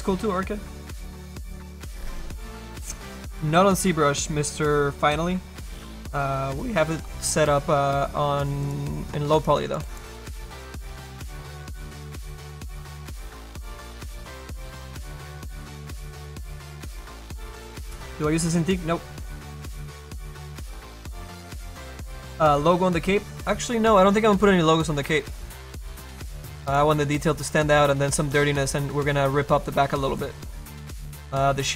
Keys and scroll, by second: 9.5 space, 30.1 space.